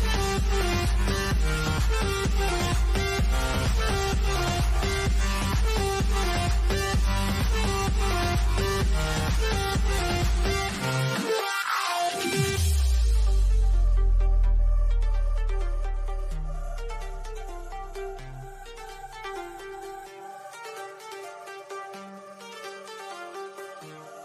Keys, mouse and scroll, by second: 5.3 scroll down 1, 6.9 click, 10.7-13.9 shift+middle drag, 13.9-14.2 scroll up 1, 21.9 click, 22.0 click.